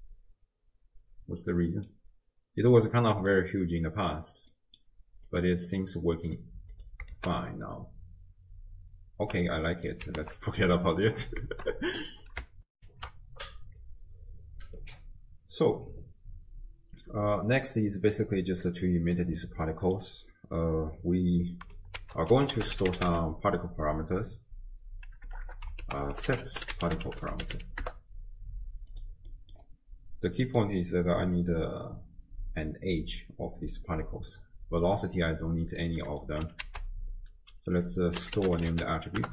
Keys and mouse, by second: 0.0-1.9 middle drag, 3.4-4.1 middle drag, 4.5 middle click, 5.3 click, 6.3-6.9 drag, 7.3 shift+space, 9.8 click, 9.8 space, 10.2 ctrl+x, 10.5 click, 11.5 shift+space, 12.7 ctrl+alt+shift+w, 12.9 ctrl+alt+shift+q, 17.0-18.2 drag, 18.7 click, 19.4 middle click, 22.0 ctrl+a, 25.5 BackSpace, 29.3 middle click, 30.3 middle click, 35.8 middle click, 36.7 ctrl+a.